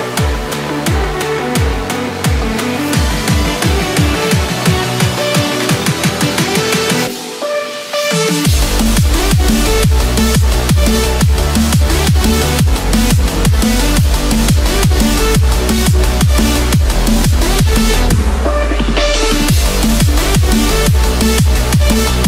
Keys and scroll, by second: 0.2 Escape, 5.8 Return, 8.0 ctrl+z, 13.5 Return, 14.2 Escape, 18.2 ctrl+z, 18.7 Escape, 21.9 Return.